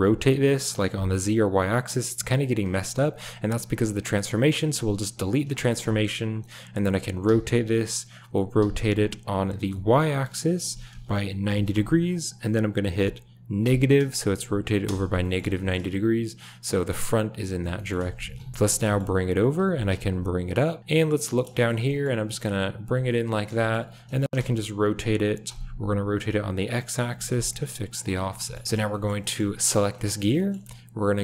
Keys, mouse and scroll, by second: 5.3 click, 5.5 shift+middle click, 7.2 r, 15.2 middle click, 15.6 shift+middle click, 17.8 shift+middle click, 18.7 g, 19.6 g, 21.0 click, 21.6 shift+click, 21.9 click, 22.2 g, 23.2 drag, 23.6 shift+drag, 23.9 r, 26.8 click, 28.1 a, 28.5 click, 28.9 shift+drag, 29.2 click, 29.6 click, 29.9 shift+middle click, 30.1 middle click, 30.3 shift+middle click.